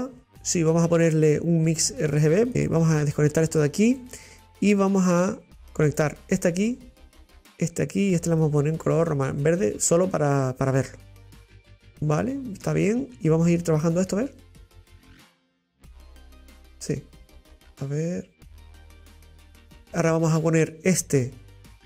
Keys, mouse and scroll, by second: 2.5 click, 3.7 click, 5.0 click, 8.4 click, 11.9 scroll down 1, 12.1 shift+middle click, 12.8 scroll up 2, 14.1 click, 15.4-18.3 drag, 19.8-20.9 middle drag, 21.2-21.8 drag.